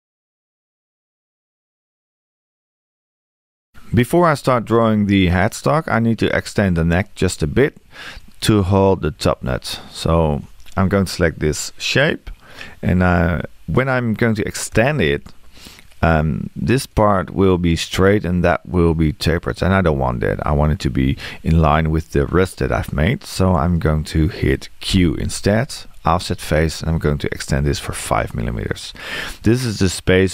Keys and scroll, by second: 14.7 e, 22.7 Escape.